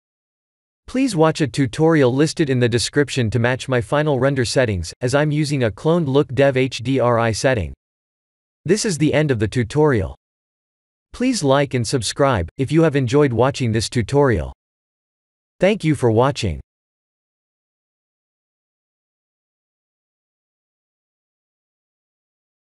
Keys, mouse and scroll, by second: 0.2 click, 2.8 click.